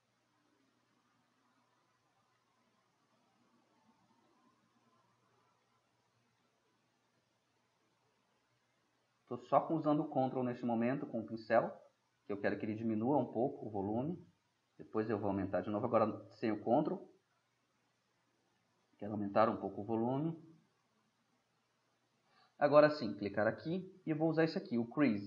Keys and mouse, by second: 5.7-7.1 middle drag, 7.6-8.3 middle drag, 8.3-10.4 drag, 10.4-12.1 middle drag, 13.3 middle drag, 14.9 middle drag, 15.0-19.4 drag, 18.7-20.4 middle drag, 19.7 click, 21.3-22.4 middle drag.